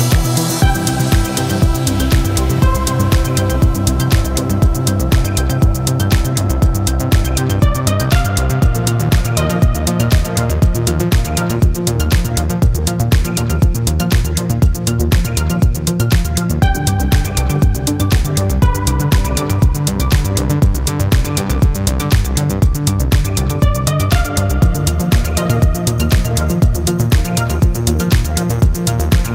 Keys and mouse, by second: 15.8 middle click, 17.2-21.4 drag, 27.0 click, 28.0-29.3 middle drag.